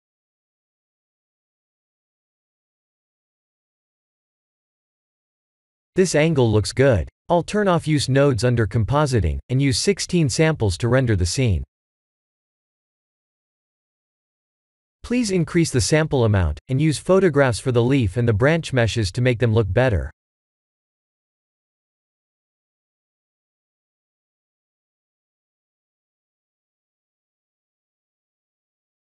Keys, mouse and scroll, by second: 2.9-4.7 drag, 6.7 click, 8.2-9.4 drag, 9.9-13.6 drag, 22.0 click, 27.5 click, 28.1 ctrl+s.